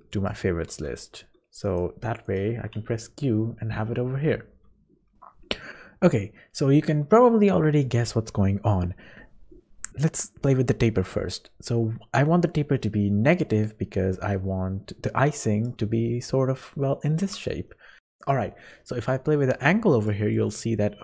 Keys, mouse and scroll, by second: 0.8 scroll down 1, 1.6 scroll down 2, 1.6 right click, 2.2 click, 2.7 q, 4.9 scroll up 1, 8.0-8.4 scroll up 1, 11.0 click, 16.6 middle click, 17.7 shift+middle click, 18.0 click, 19.6 click, 20.3 click.